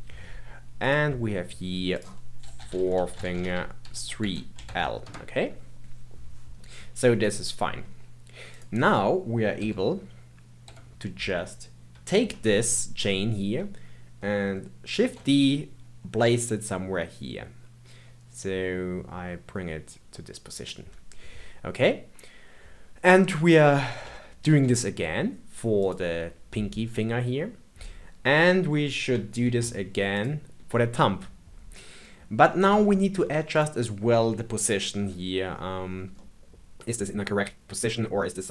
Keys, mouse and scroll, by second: 0.8 click, 1.9-5.0 drag, 6.5-6.9 scroll down 2, 7.2-8.5 middle drag, 8.5 click, 9.6 l, 10.6 KP_3, 15.0 shift+d, 24.4 shift+d, 29.4 shift+d, 30.6 g, 31.9 scroll up 3, 32.8 shift+middle click, 33.5 click, 34.9 KP_3, 35.8-36.1 scroll down 2, 36.1-37.9 middle drag.